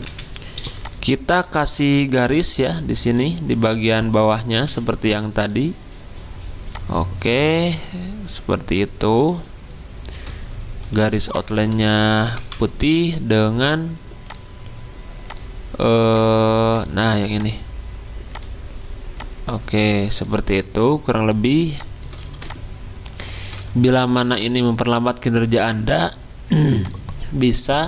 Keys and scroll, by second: 0.0 F10, 4.6 p, 10.9 x, 12.3 v.